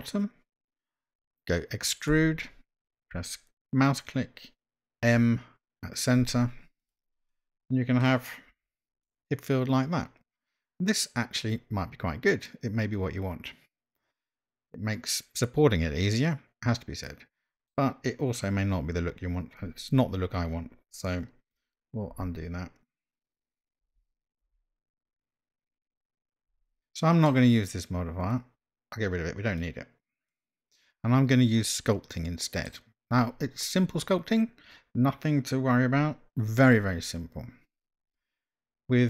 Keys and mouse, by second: 2.2 e, 5.1 m, 6.8 click, 7.4 middle click, 8.6 Tab, 9.0-17.7 middle drag, 22.4 ctrl+z, 23.8 ctrl+z, 24.4 ctrl+z, 26.6 Tab, 26.8-27.2 middle drag, 29.8-30.4 drag, 30.4-32.7 middle drag.